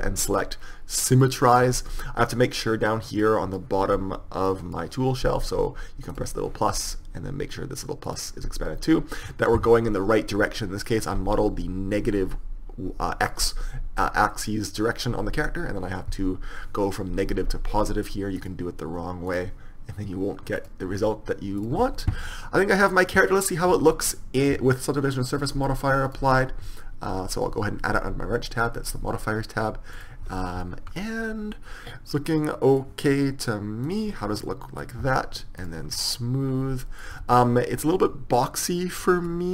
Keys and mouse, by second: 3.3 click, 4.6 click, 4.6 typing, 9.0-10.1 drag, 10.7-12.5 middle drag, 18.4-20.3 drag, 20.6-21.7 drag, 22.3-24.2 middle drag, 23.9 Tab, 25.4-27.9 drag, 28.8-30.7 drag, 30.7-32.6 middle drag, 34.0-36.5 drag, 37.1 Tab, 37.3 Tab.